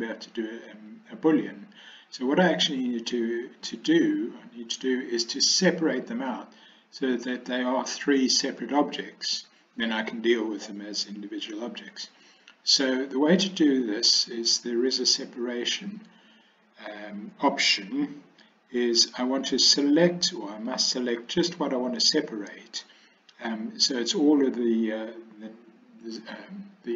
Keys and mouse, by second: 20.8 click.